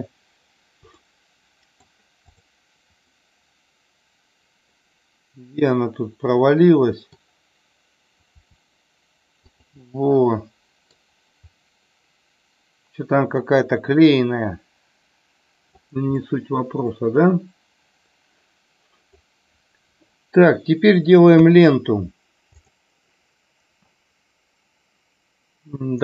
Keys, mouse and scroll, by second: 1.0-1.8 middle drag, 2.2 click, 3.1-7.2 middle drag, 9.3 click, 9.8-11.0 middle drag, 11.5-15.7 middle drag, 16.1-19.2 middle drag, 21.5 KP_1, 22.6 click.